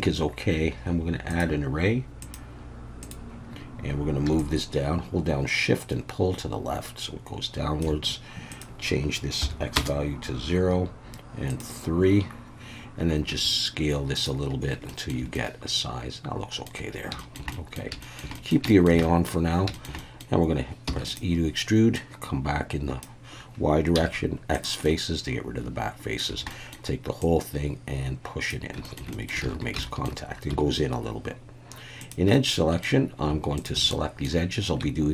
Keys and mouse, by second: 1.3 click, 2.2-3.1 drag, 4.5-7.9 shift+drag, 8.6-10.7 drag, 11.5 click, 13.3 s, 14.2 click, 14.9 shift+middle click, 15.3-16.7 middle drag, 17.2 shift+middle click, 17.5 middle click, 18.0 shift+middle click, 18.4 middle click, 18.7 shift+middle click, 19.0 middle click, 19.7 shift+middle click, 20.0 middle click, 20.9 e, 21.1 click, 22.0-23.0 drag, 23.9 x, 24.9-26.2 middle drag, 26.3 a, 26.5 middle click, 27.2-28.5 drag, 28.8 shift+middle click, 29.1 middle click, 29.4 alt+a, 29.8 shift+middle click, 30.5 2, 32.3 middle click, 33.5 shift+click, 33.9 middle click.